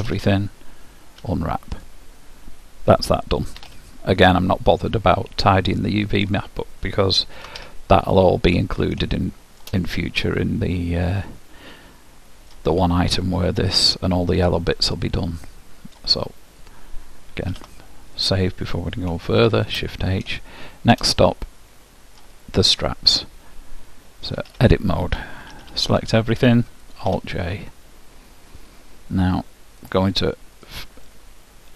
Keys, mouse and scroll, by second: 0.1 a, 1.3 u, 3.6 Tab, 4.6 middle click, 5.2-7.1 middle drag, 7.4 alt+h, 9.3 middle click, 10.2 middle click, 10.4-11.8 middle drag, 14.8-16.7 middle drag, 16.7-18.7 drag, 17.6 ctrl+w, 19.5 shift+h, 20.4-25.6 middle drag, 24.4 Tab, 25.6 a, 27.2 alt+j, 29.9-31.7 drag, 31.2-31.7 middle drag.